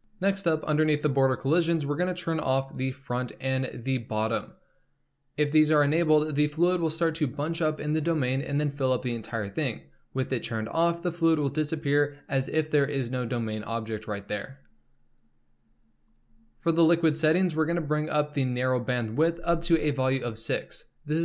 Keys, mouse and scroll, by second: 0.0-0.7 scroll up 8, 0.7-1.3 scroll down 2, 1.3-2.7 scroll down 4, 2.7-7.0 drag, 15.5-18.3 scroll down 7, 18.3-20.5 drag.